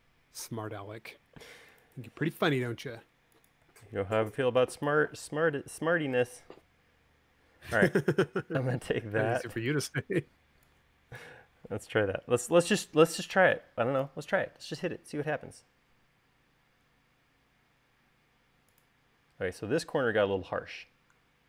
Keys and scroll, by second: 1.2 space, 13.3 space, 14.2 super+s, 14.7 u, 20.3 space.